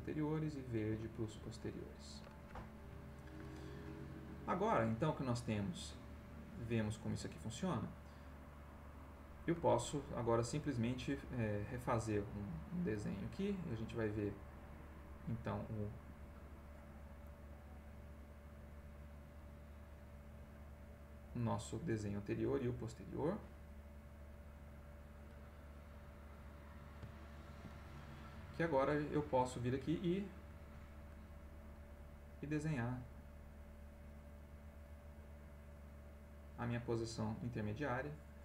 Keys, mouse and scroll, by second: 0.0 click, 0.9 Escape, 2.0 click, 2.6-3.9 middle drag, 4.7-7.9 drag, 12.1 click, 12.9 click, 14.9 click, 17.2 click, 17.8 click, 19.2 click, 19.8-20.9 right drag, 22.6 click, 23.0 click, 23.8 right click, 26.5 middle click, 27.1 ctrl+middle click, 28.8 click, 29.8 click, 32.0-33.3 drag, 33.5 click, 34.7 click, 35.7 click, 37.6 click.